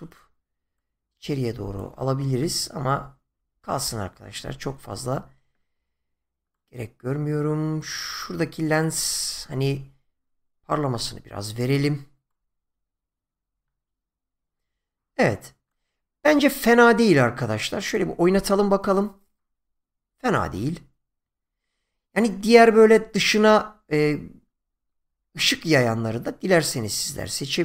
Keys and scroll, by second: 2.8 ctrl+z.